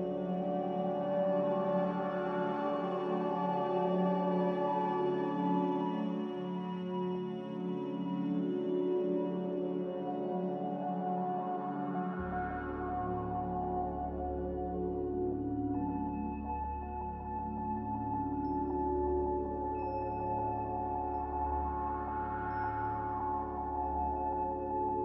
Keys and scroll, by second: 3.0 z, 9.6 7, 9.9 Return, 14.9 r, 18.1 ctrl+c, 22.0 z.